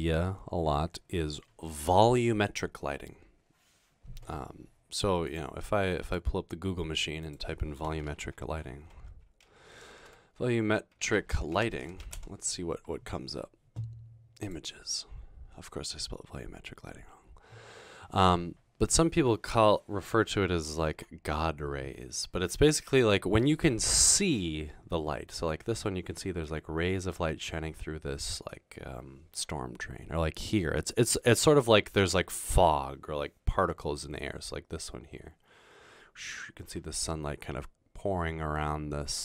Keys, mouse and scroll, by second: 8.1-12.5 typing, 15.0-15.7 typing, 20.8 ctrl++, 21.0 ctrl++.